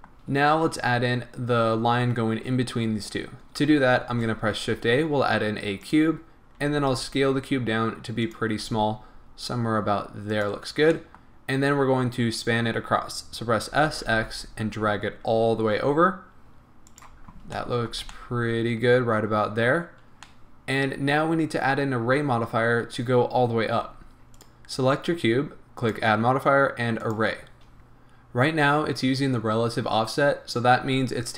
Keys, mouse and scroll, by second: 2.6-4.1 scroll up 2, 4.1 shift+a, 6.7 s, 8.4 click, 8.7-10.4 middle drag, 8.7 s, 10.4 click, 11.0-17.0 middle drag, 13.7 s, 17.0 click, 17.6-24.4 middle drag, 18.0 a, 21.7-23.6 scroll down 2, 23.6 scroll up 2, 24.4 click, 25.8-27.8 drag, 27.8-31.3 middle drag.